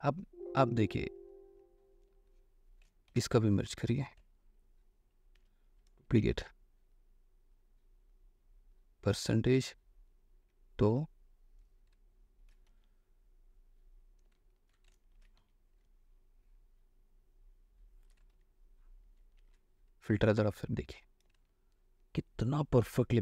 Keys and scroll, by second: 0.0 ctrl+y, 3.0 ctrl+space, 3.3 ctrl+u, 5.6 ctrl+j, 6.1 ctrl+alt+j, 6.4 ctrl+alt+c, 10.7 2, 12.6 ctrl+a, 12.9 ctrl+v, 14.5 alt+space, 15.0 ctrl+alt+space, 15.1-16.1 typing, 18.4 ctrl+alt+shift+v, 19.5 ctrl+h, 21.4 space.